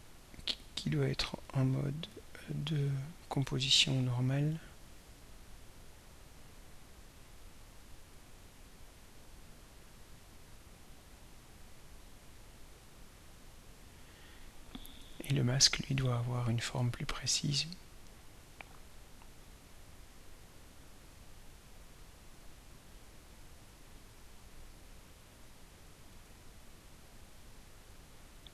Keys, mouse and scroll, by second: 0.8 click, 1.5 click, 2.1 click, 3.2 click, 6.2 click, 7.9 click, 8.6 click, 9.0 click, 9.5 click, 10.6 click, 12.8 click, 17.1-17.5 ctrl+scroll up 2, 17.9-18.4 ctrl+scroll up 4, 22.0 click, 23.7 click, 24.5 click, 26.2 click.